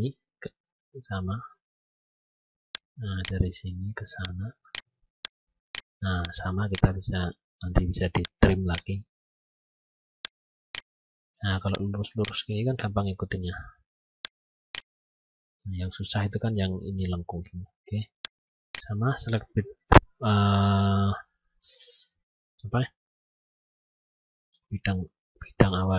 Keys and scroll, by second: 15.1 F9.